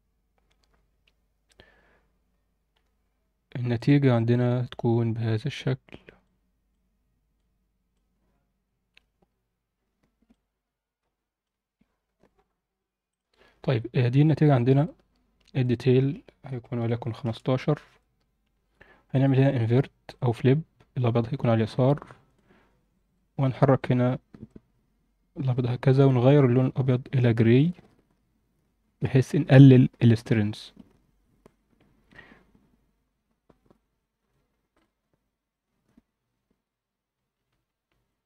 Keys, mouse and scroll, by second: 2.7 scroll up 1, 3.4-5.3 scroll down 1, 6.2 click, 7.3 click, 10.3-11.5 drag, 14.1 scroll up 1, 15.6-17.2 drag, 19.1-20.1 drag, 22.3-23.1 drag, 23.8-25.5 drag, 26.2 click, 34.7 click, 35.4-38.0 drag.